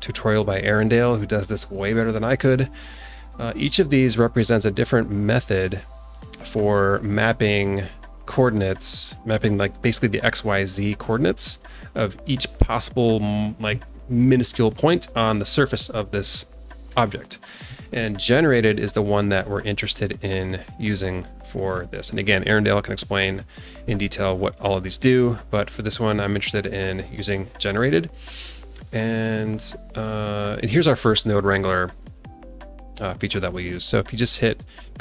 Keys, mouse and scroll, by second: 2.6 click, 3.1 click, 19.4-20.1 drag, 20.5 click, 21.0 click, 25.5-25.9 drag, 26.9-28.5 scroll down 2, 28.5 scroll down 1, 28.8 shift+middle click.